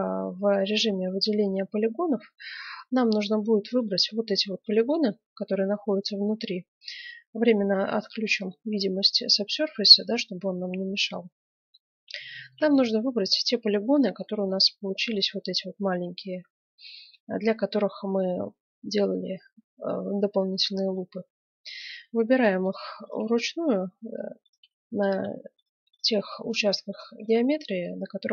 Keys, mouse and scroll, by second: 1.2 middle click, 2.3-3.6 middle drag, 3.6-6.3 right drag, 8.3-9.9 drag, 9.9-11.5 middle drag, 11.6 middle click, 12.2-14.0 middle drag, 14.2 middle click, 14.8-17.0 drag, 14.8-16.6 right drag, 16.8 right click, 17.5-19.2 middle drag, 21.6 right click, 22.0-26.3 middle drag, 26.3 click, 26.4-27.8 right drag, 27.8-28.3 middle drag.